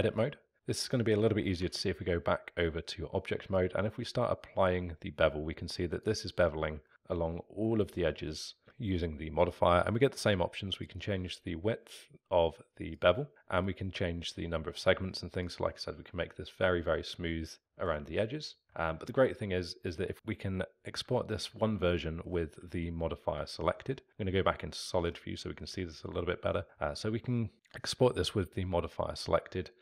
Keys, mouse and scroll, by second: 1.6 Tab, 3.5-6.6 drag, 6.8-9.6 alt+middle drag, 10.8-13.4 drag, 13.6-16.9 drag, 16.9-17.6 scroll up 3, 17.6-18.1 alt+middle drag, 18.1 scroll up 2, 18.6 alt+middle drag, 18.9-21.2 scroll down 2, 21.2-23.3 alt+middle drag, 23.3 z, 25.1-27.5 middle drag.